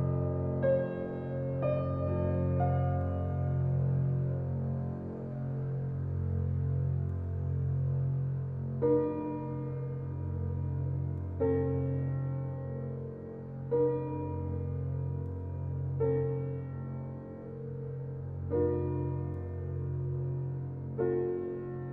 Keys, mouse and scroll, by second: 1.1-2.4 scroll down 4, 3.9-7.1 drag, 7.1 g, 10.4 g, 13.0 g, 15.8 g, 18.2 g, 21.1 click, 21.5-21.9 scroll down 2.